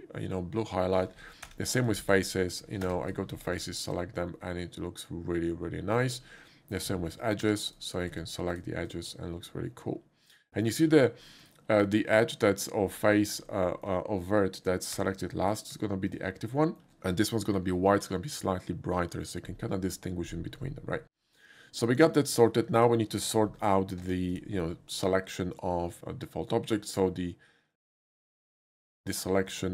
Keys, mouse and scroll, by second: 1.5 2, 1.8 click, 2.9 3, 3.1 click, 3.6 shift+click, 4.0 shift+middle click, 4.4-6.0 shift+middle drag, 7.5 2, 7.7 click, 8.5 shift+click, 10.5 shift+middle click, 11.3 shift+middle click, 11.9 shift+middle click, 13.7 shift+middle click, 15.0 1, 15.5 click, 16.1 shift+click, 16.6 shift+middle click, 22.8 click, 24.1 Tab, 24.3 click, 26.9 click, 27.7 click.